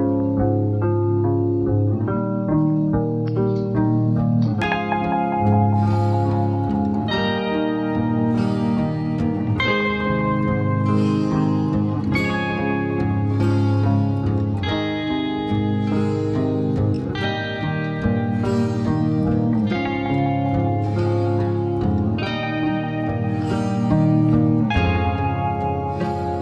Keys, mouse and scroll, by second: 0.0 scroll down 1, 0.0-1.3 typing, 1.2 click, 2.7 click, 3.6 typing, 3.8 click, 4.8 click, 5.5 space, 5.5 click, 5.7 space, 6.8 click, 7.4 alt+scroll down 1, 8.9 alt+scroll up 1, 9.2 space, 9.4 click, 9.5 space, 14.5 ctrl+j, 17.7 click, 20.1 typing, 21.2 click, 21.2 typing, 23.6 typing, 24.8 click, 24.8 typing.